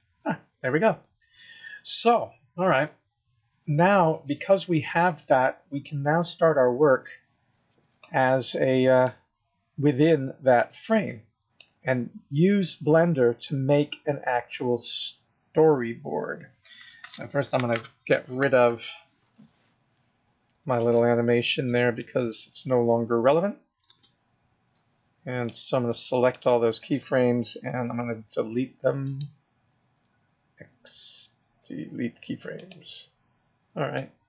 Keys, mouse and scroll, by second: 0.6-1.0 scroll up 1, 1.0-1.9 scroll down 1, 1.9 scroll down 1, 2.0-3.6 scroll up 1, 9.1 click, 11.8 scroll up 3, 12.5 scroll down 2, 14.0-14.5 scroll up 1, 14.5-15.5 scroll down 2, 17.2 alt+space, 20.9 click, 23.8 space, 25.4 click, 27.9 Delete, 29.0 right click, 34.0 click.